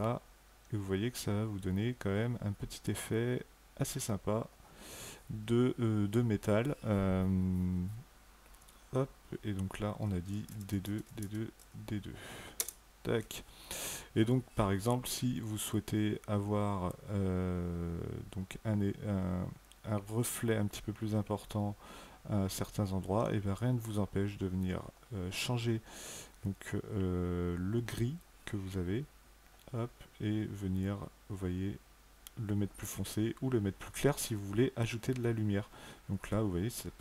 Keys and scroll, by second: 10.3-11.4 typing, 12.4 Return.